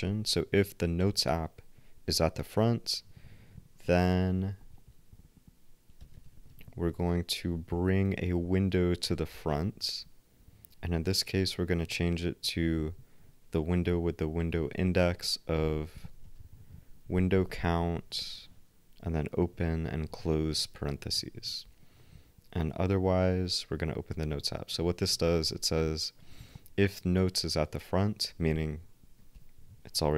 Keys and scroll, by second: 4.0 shift+super+f, 15.1-16.4 typing, 17.8-19.6 typing, 29.3 ctrl+alt+n.